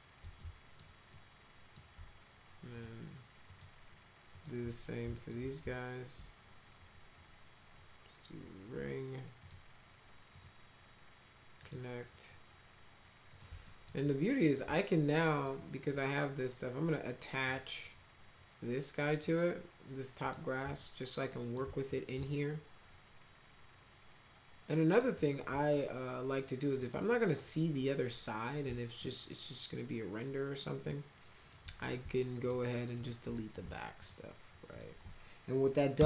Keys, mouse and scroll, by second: 0.3 alt+middle click, 1.1 alt+middle click, 2.7 click, 3.4 click, 4.3 click, 4.6 middle drag, 5.1 alt+middle click, 9.3 click, 10.3 right click, 11.5 click, 13.2 click, 13.6 alt+middle click, 14.3 alt+middle click, 17.4 click, 20.2 click, 20.7-21.5 alt+middle drag, 22.2-24.9 alt+middle drag, 25.2 alt+middle drag, 26.7 click, 28.9-31.5 alt+middle drag, 31.7 click, 32.3 ctrl+click, 32.9 ctrl+click, 33.3 middle click, 33.9 ctrl+click, 34.6 ctrl+click, 35.9 Delete.